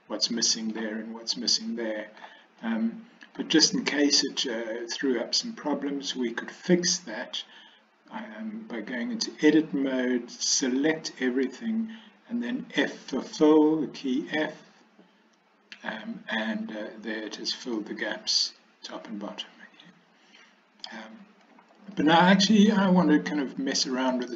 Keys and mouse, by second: 1.6-2.3 middle drag, 2.7-3.5 middle drag, 8.9 Tab, 10.6 a, 14.7 f, 15.6 f, 17.8-20.9 middle drag, 22.0 middle click.